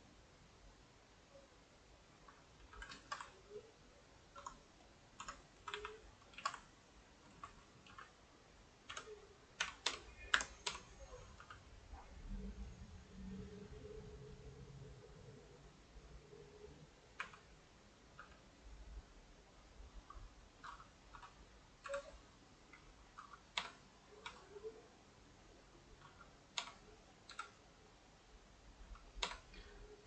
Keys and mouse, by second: 2.6 a, 2.7 a, 2.9 shift+right click, 3.2-4.5 ctrl+middle drag, 4.5 Tab, 4.9 click, 5.3 Tab, 5.6-8.0 typing, 7.1 ctrl+right click, 14.5-17.2 middle drag, 17.2 r, 17.8 middle click, 18.2 g, 21.0 click, 21.2 l, 22.4 x, 23.3 click, 23.6 l, 23.9 middle click, 24.3 s, 26.3 click, 26.6 l, 27.8 x, 28.9 click, 29.2 l, 29.5-30.0 middle drag.